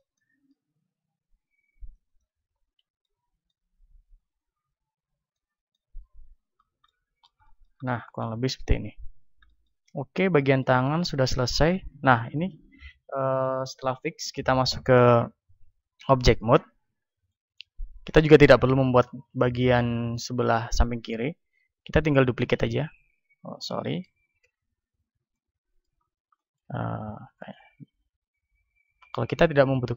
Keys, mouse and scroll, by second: 1.1 ctrl+r, 2.1-4.0 drag, 2.7 a, 4.0-5.9 middle drag, 5.9 Tab, 6.6-24.5 middle drag, 8.7 KP_1, 12.2 KP_1, 24.5 Tab, 25.1-28.9 middle drag, 27.7 ctrl+Tab, 29.5-29.9 right drag.